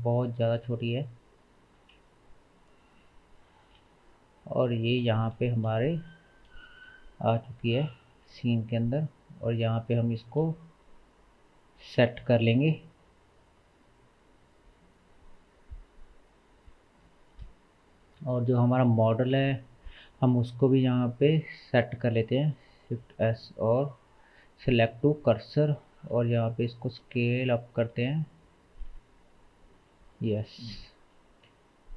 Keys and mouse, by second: 0.6 s, 2.0 KP_0, 3.8-4.9 middle drag, 3.8 s, 5.3-5.7 shift+middle drag, 6.2-16.8 drag, 6.8 g, 10.2 g, 12.2 r, 19.9 shift+s, 22.9 shift+s, 26.0 middle click, 26.1 s, 27.0 s, 27.9 s, 28.9 s, 30.5 g.